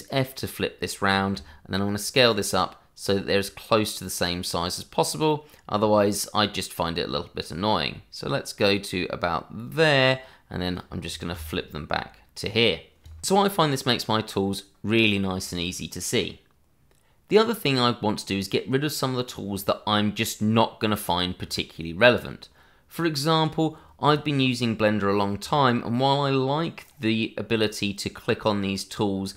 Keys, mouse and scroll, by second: 1.4 click, 5.4 click, 6.3 click, 11.3 click.